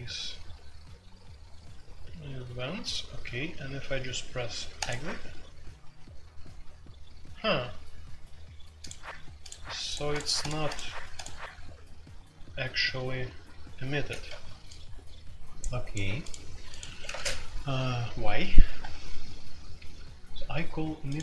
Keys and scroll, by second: 16.8 Escape, 17.0 space, 17.1 Tab.